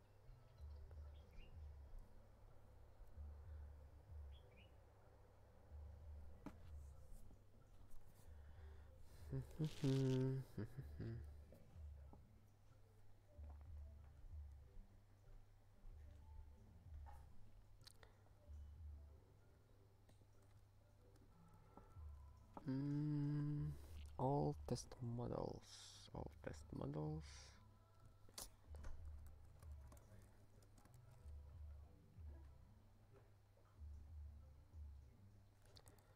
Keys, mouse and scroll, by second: 0.7 scroll down 1, 18.8 scroll down 1, 20.1 click, 20.2 click, 20.7 ctrl+space, 21.1 ctrl+p, 21.5 ctrl+w, 21.7 ctrl+n, 21.9 ctrl+n, 28.1 ctrl+p, 28.4 ctrl+e, 29.0 ctrl+b, 29.3 Return, 29.4-30.9 typing, 35.4-36.1 typing.